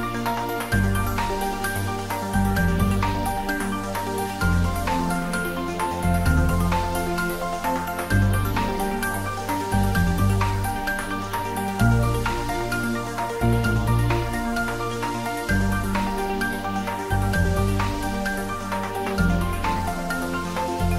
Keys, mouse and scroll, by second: 2.5 s, 3.1 click, 3.3 ctrl+z, 3.7-5.2 typing, 5.6 click, 5.7 Tab, 5.9 middle click, 6.6 ctrl+middle click, 7.0-8.3 middle drag, 8.3 ctrl+middle click, 9.0 ctrl+middle click, 10.2 Tab, 10.5 s, 12.5 click, 12.7 Tab, 12.9 ctrl+middle click, 13.4-15.0 middle drag, 15.0 Tab, 15.3 click, 15.6 middle click, 16.5 middle click, 16.9 Tab, 17.2 ctrl+middle click, 17.6-19.3 middle drag, 19.3 middle click, 19.8 right click, 20.2 click, 20.5-20.9 ctrl+middle drag.